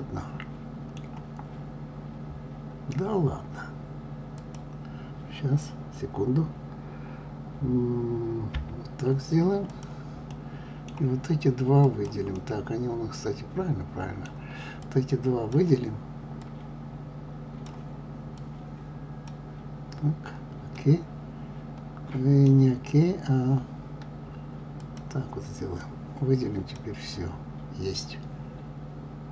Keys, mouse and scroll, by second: 4.4 click, 8.5 KP_Divide, 9.7 click, 10.3-11.8 middle drag, 11.8 click, 12.3-14.8 middle drag, 14.8 click, 16.4-18.4 drag, 20.7-23.7 middle drag, 24.7-25.9 drag.